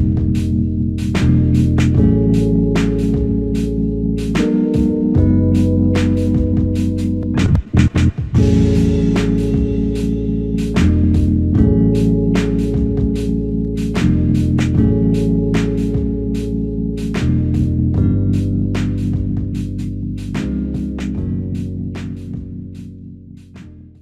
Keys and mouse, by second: 1.0 shift+click, 2.6 alt+click, 4.4 shift+click, 5.4 alt+click, 8.6 alt+c, 8.9 ctrl+z, 11.0 double click, 13.1 shift+click, 14.1 shift+click, 16.3 ctrl+alt+click, 20.8 ctrl+alt+click, 22.0 alt+click, 23.1 shift+click.